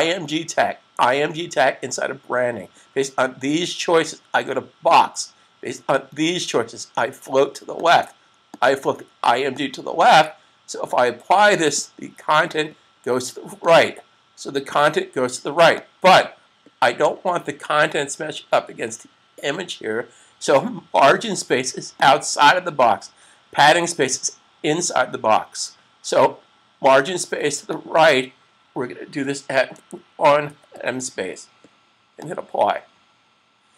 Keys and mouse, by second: 4.7 click, 7.6 click, 21.9 click, 27.5 click, 29.6-30.2 typing, 32.3 click, 32.3 typing.